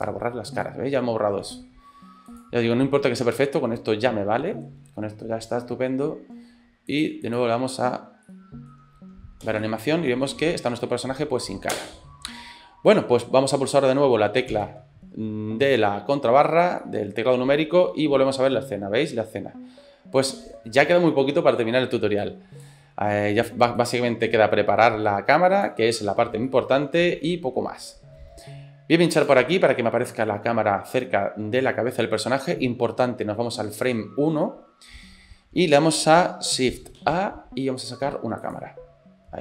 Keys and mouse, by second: 0.6 middle click, 2.3 click, 2.8-4.5 middle drag, 7.0 click, 8.3 middle click, 9.5 space, 9.6 middle click, 10.8 shift+middle click, 11.8 space, 17.0-18.0 middle drag, 18.3 space, 20.4 space, 22.3 click, 23.8-25.8 drag, 26.5 shift+middle click, 27.1 middle click, 29.1 click, 29.7 middle click, 37.0 shift+a.